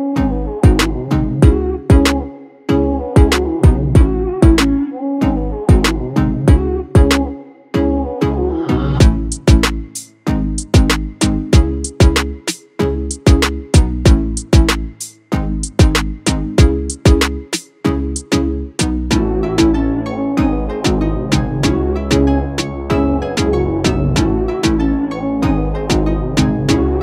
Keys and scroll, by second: 1.1-1.8 typing, 4.5-5.8 typing, 8.7-10.0 typing, 12.4-13.5 typing, 14.8-16.0 typing, 19.4 w, 21.0-22.7 typing, 24.7-25.4 typing.